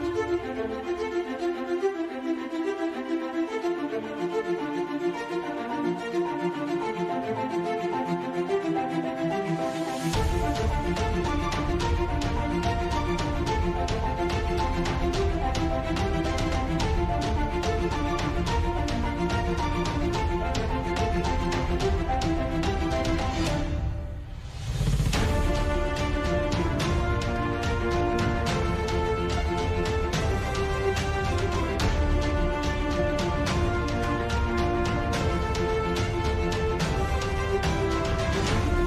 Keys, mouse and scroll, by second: 0.9 Tab, 1.1 middle click, 2.2 Tab, 2.6 Tab, 4.3 z, 4.4 z, 4.5 z, 4.9 middle click, 5.5 z, 5.8-6.8 ctrl+KP_Add, 7.9-8.5 ctrl+KP_Add, 9.1 ctrl+KP_Add, 9.9 ctrl+KP_Add, 10.9 ctrl+i, 11.3 KP_5, 11.4 KP_1, 12.0 KP_Divide, 12.7 z, 13.7 b, 14.3 z, 14.7 KP_5, 16.1 ctrl+z, 16.6 ctrl+z, 19.6 ctrl+z, 20.2 p, 20.7 Tab, 21.1 g, 21.5 KP_Divide, 21.9 KP_Divide, 22.4 KP_Divide, 23.1 KP_Divide, 23.7 KP_5, 24.1 Tab, 24.3 a, 24.4 w, 25.1 Tab, 25.6 click, 26.1 click, 27.1-28.5 drag, 30.6-31.8 drag, 34.8-37.5 drag, 37.8 click, 38.1 ctrl+z, 38.5 shift+f.